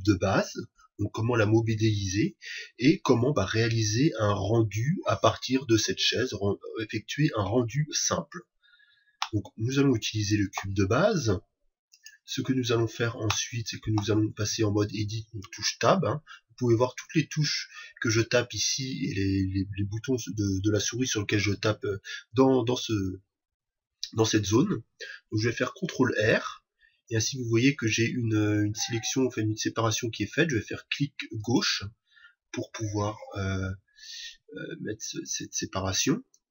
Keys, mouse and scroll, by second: 9.2-15.2 middle drag, 15.5 Tab, 26.1 ctrl+r.